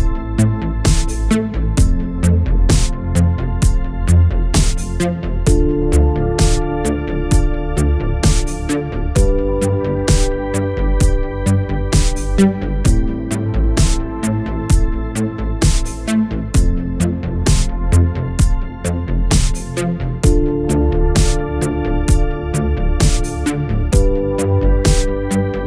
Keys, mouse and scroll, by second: 1.0-1.3 scroll down 2, 1.3-3.5 shift+middle drag, 3.5 scroll down 2, 3.8-5.0 middle drag, 5.0 /, 5.5 middle click, 6.1 Tab, 6.4-7.0 middle drag, 7.0 click, 7.4-8.2 shift+middle drag, 8.2 scroll up 1, 8.5-9.0 middle drag, 9.0 click, 10.6-11.1 middle drag, 11.1 Tab, 11.6-14.0 middle drag, 14.0 alt+a, 14.3-16.2 middle drag, 16.2-16.8 drag, 16.8-18.0 middle drag, 18.0 scroll down 2, 18.2-21.8 middle drag, 21.8-22.3 scroll up 2, 22.3 middle click, 22.8-23.1 scroll up 2, 23.5 click, 24.0-24.3 scroll down 2, 24.3 middle click, 25.1-25.4 scroll up 2, 25.4 shift+middle click.